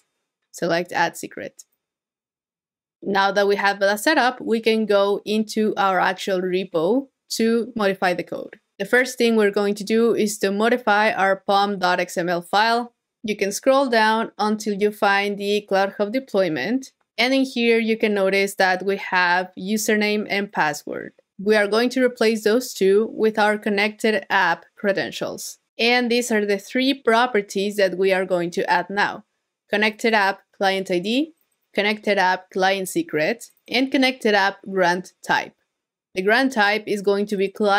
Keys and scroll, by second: 13.8 super+f, 14.6 super+v.